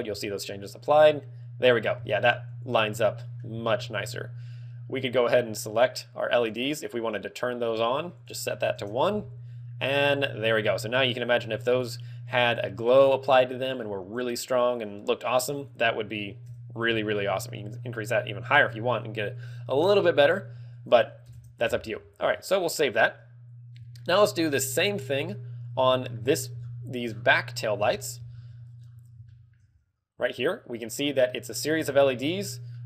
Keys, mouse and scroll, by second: 1.9 ctrl+w, 5.2 right click, 6.4 click, 8.1 ctrl+click, 8.7 ctrl+click, 15.5 ctrl+click, 20.7 ctrl+click, 22.2 ctrl+w, 23.9 shift+middle click, 25.8 shift+middle click, 26.5-27.3 scroll down 9, 27.8 KP_Divide, 28.3 ctrl+KP_1, 28.7 scroll down 3, 29.6 shift+middle click, 29.6 scroll up 3, 30.3 z, 30.4 right click, 31.1 right click, 32.1 z, 32.3 scroll down 3.